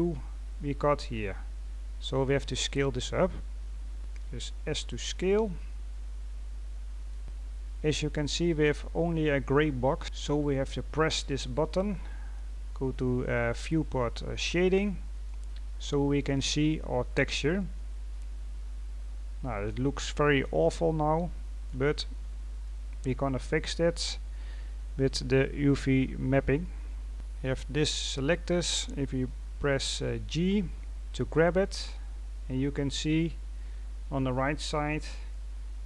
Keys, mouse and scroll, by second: 1.8-2.4 scroll up 2, 2.4-3.9 scroll down 1, 7.2 scroll up 1, 16.3-16.9 scroll up 4, 17.1 scroll down 2, 17.3-20.1 middle drag, 20.1-20.5 scroll up 1, 20.5 scroll down 1, 20.6-21.9 middle drag, 21.9-22.6 scroll down 3, 22.6 middle click, 23.3-23.9 scroll up 1, 24.7-25.0 scroll down 1, 25.0-25.4 scroll up 2, 25.4-26.5 scroll down 4, 26.5-27.1 scroll up 3, 27.1-28.1 scroll down 1.